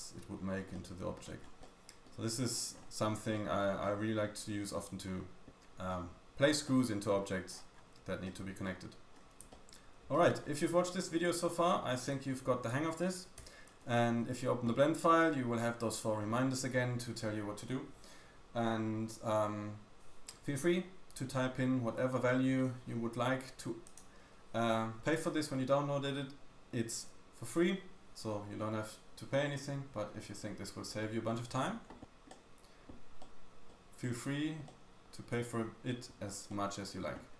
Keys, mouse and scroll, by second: 0.3-0.7 scroll up 3, 0.7 middle click, 0.7-1.0 scroll down 1, 1.4 scroll down 2, 1.6 middle click, 2.2 scroll up 2, 2.3-3.3 scroll down 3, 3.3 middle click, 3.7 scroll down 1, 3.9-4.9 scroll up 3, 4.9-5.8 scroll down 4, 5.5 middle click, 5.5-5.9 scroll up 2, 5.9 middle click, 6.6 middle click, 7.5 scroll up 1, 7.7-8.0 scroll down 2, 8.0 scroll up 1, 8.2 middle click, 9.1-9.4 scroll up 3, 9.1 y, 9.5 shift+scroll down 1, 9.7 shift+middle click, 10.4 scroll down 1, 10.8-11.2 shift+middle drag, 11.2 scroll up 3, 11.6-12.1 shift+middle drag, 11.6 shift+scroll down 1, 12.2-13.4 scroll down 2, 13.4 n, 13.6-13.9 scroll up 2, 14.1-14.7 scroll down 1, 32.3 middle click, 33.2 middle click, 33.7 middle click, 34.6 middle click, 34.9-35.4 scroll up 2, 35.4-36.4 scroll down 1, 36.4 middle click.